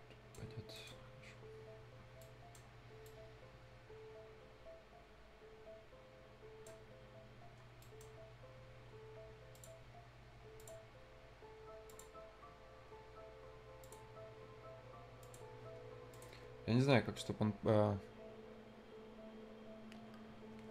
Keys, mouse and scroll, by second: 0.7 right click, 1.0 scroll down 1, 2.1 right click, 3.0-7.1 right drag, 7.1-7.6 scroll up 2, 7.6 scroll down 1, 7.8 right click, 8.1 scroll up 1, 9.5 click, 9.7 scroll down 1, 9.9-10.5 scroll up 1, 10.5 click, 10.8 scroll down 1, 11.0 scroll up 1, 12.1-12.4 scroll down 1, 12.4 scroll up 1, 13.8 click, 14.0 scroll down 1, 14.2 scroll up 1, 15.2 click.